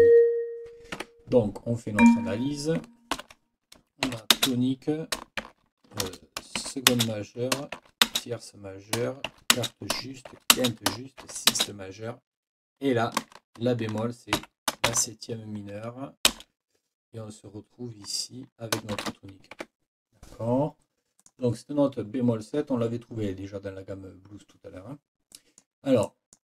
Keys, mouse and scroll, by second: 1.0 Escape, 2.0 click, 3.2 ctrl+l, 4.0 shift+t, 4.3 shift+space, 6.0 shift+BackSpace, 6.9 shift+space, 8.0 shift+space, 9.5 shift+space, 10.3 shift+9, 10.5 shift+space, 11.5 shift+space, 14.4 b, 16.3 space, 18.9 shift+t, 19.5 Escape, 21.2 click, 25.3-25.8 scroll down 1, 26.0 click, 26.1 scroll down 1, 26.2 click.